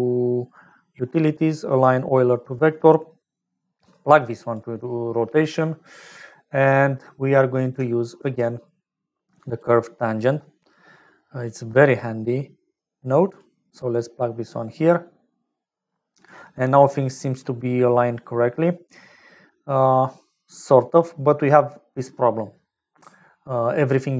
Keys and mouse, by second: 3.5-4.6 drag, 4.9 click, 5.9 middle click, 7.3 click, 8.1 shift+a, 12.7 click, 15.8 click, 17.0 click, 21.0 click.